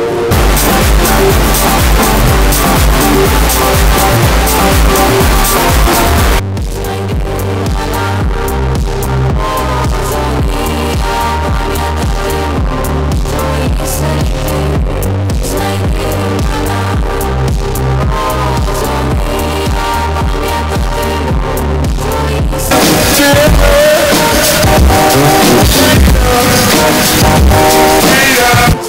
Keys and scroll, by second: 6.8 Page_Down, 28.8 space.